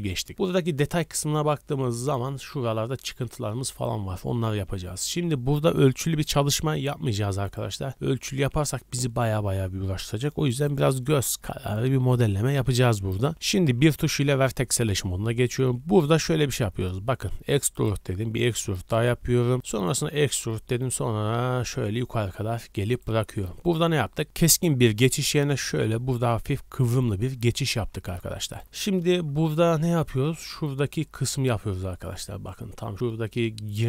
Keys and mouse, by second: 13.3 2, 13.7 1, 14.1 click, 15.2 e, 18.1 e, 20.1 e.